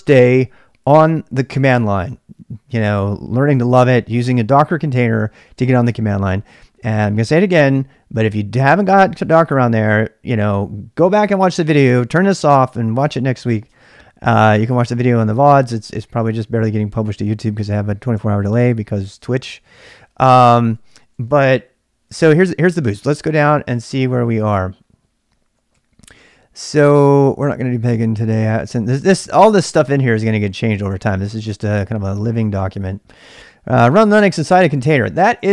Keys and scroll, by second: 18.8-21.3 typing, 19.9 Return, 20.5 ctrl+[, 23.1-35.5 typing, 23.6 ctrl+[.